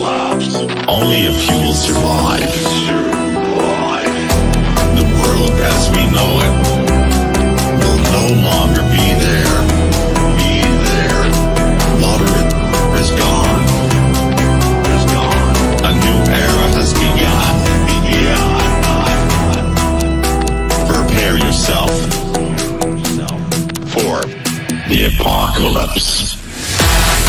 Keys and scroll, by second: 6.8 shift+F2, 8.1 F9.